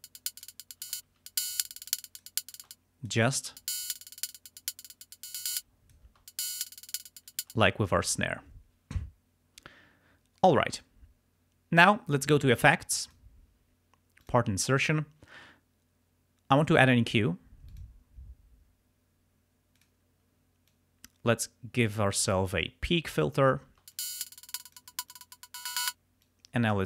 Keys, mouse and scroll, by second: 0.3 click, 0.9 space, 2.0 click, 2.7 click, 2.7 space, 3.5 space, 5.5 space, 5.6 click, 7.4 space, 13.1 click, 14.3 click, 17.7 click, 19.8 click, 20.7-22.9 drag, 23.9 space, 24.0 click, 24.8 click, 25.3 click, 26.3 click.